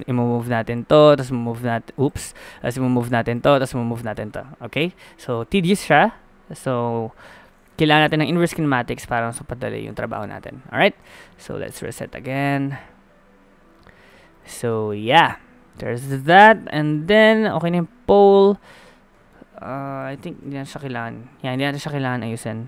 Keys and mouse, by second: 0.3 g, 1.5 g, 2.3 ctrl+z, 2.9 g, 3.9 g, 10.0 ctrl+z, 11.0 a, 11.2 a, 11.8 alt+g, 12.0 alt+r, 12.1 alt+s, 12.5 a, 16.3 middle click, 17.5 click, 18.3 click, 18.4 click, 20.0-22.0 middle drag, 22.1 middle click.